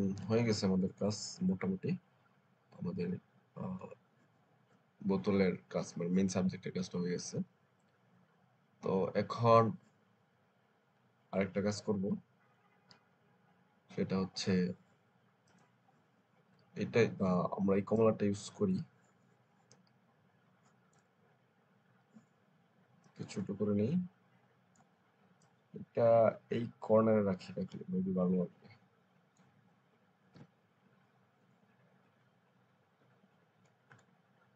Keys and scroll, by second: 30.3 Return.